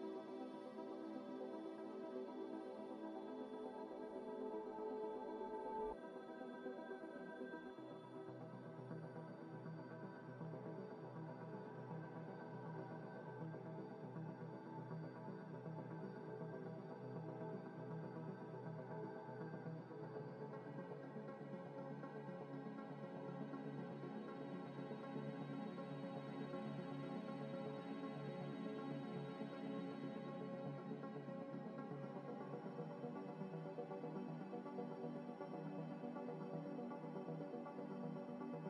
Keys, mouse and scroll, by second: 0.0 Tab, 0.8 Tab, 1.2 scroll down 1, 1.9 Tab, 2.3 a, 2.7 Tab, 3.0 Tab, 3.0 Tab, 3.8 scroll up 1, 4.7 double click, 4.9 scroll up 2, 5.1 middle click, 5.6 double click, 5.8 Tab, 7.4 scroll up 1, 8.3 3, 8.8 Tab, 9.4 middle click, 10.5 double click, 12.6 Tab, 13.2 Tab, 13.5 Tab, 13.7 Tab, 13.7 Tab, 15.7 double click, 18.2 double click, 19.7 Tab, 20.6 3, 21.2 a, 21.8 scroll down 1, 22.5 scroll up 1, 23.1 u, 24.3 scroll down 1, 25.1 u, 26.2 u, 28.6 u, 30.6 g, 31.6-32.2 scroll up 1, 32.2 s, 32.9 ctrl+z, 33.3 ctrl+z, 34.2 g, 34.8 s, 35.3 scroll up 1, 36.0-38.6 typing.